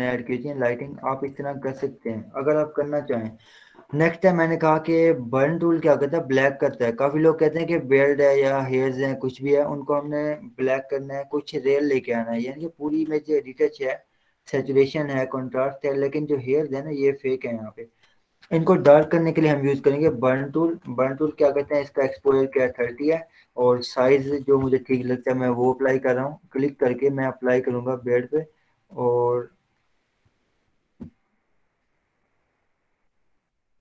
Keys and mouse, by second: 1.0 click, 3.4 z, 5.4 click, 7.7 h, 9.6-12.6 drag, 19.2 right click, 20.5 click, 21.5-25.8 typing, 26.4-30.3 drag, 30.3 [, 30.5 [, 30.8 [, 31.0 [, 31.8-33.0 drag, 33.0 click.